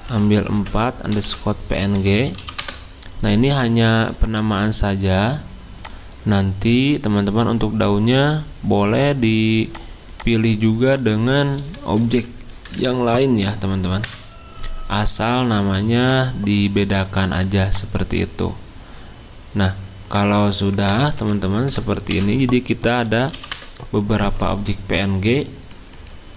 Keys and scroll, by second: 0.1 BackSpace, 1.1-2.9 typing, 4.7-5.9 typing, 11.8-12.1 BackSpace, 14.0 Return, 17.1 typing, 20.9-23.8 typing, 24.6 alt+Tab, 25.7 alt+Tab, 25.9 alt+Tab.